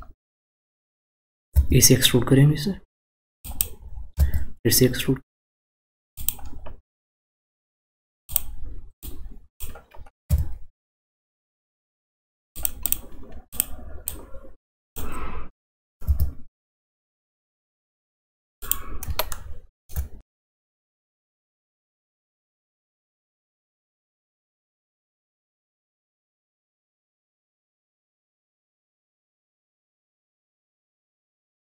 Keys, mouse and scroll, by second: 0.0-0.6 scroll up 2, 0.6-1.1 scroll up 1, 1.5 e, 4.1 e, 8.2 click, 9.0 click, 10.3 s, 12.8 click, 13.5 click, 14.0 click, 16.0 e, 19.3-20.6 shift+middle drag, 20.6 e, 22.4 click, 23.0 drag, 24.3 s, 27.0 scroll down 2, 27.6-28.2 scroll down 2, 28.2 shift+middle click, 29.0-30.1 scroll down 3, 30.1-31.1 shift+middle drag, 31.1-31.6 scroll up 6.